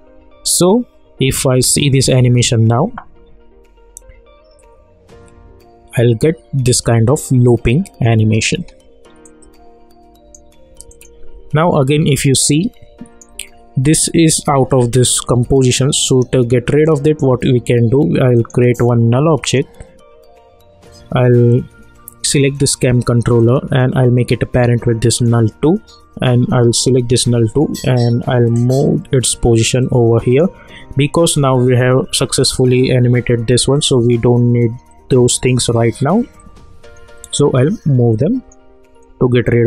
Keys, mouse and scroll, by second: 2.2 space, 9.2 click, 9.8 space, 10.9-15.5 drag, 15.6-17.1 drag, 17.1 right click, 18.3 click, 18.4 click, 22.2-25.1 drag, 28.5-32.6 drag, 34.9-39.6 drag.